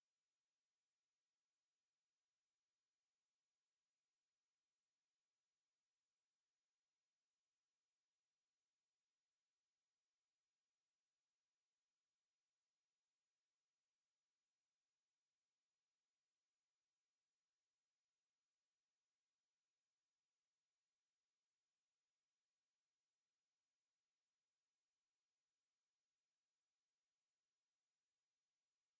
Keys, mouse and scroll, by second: 5.1 click, 13.4 g, 18.7-28.3 click, 28.3 g, 28.6 click.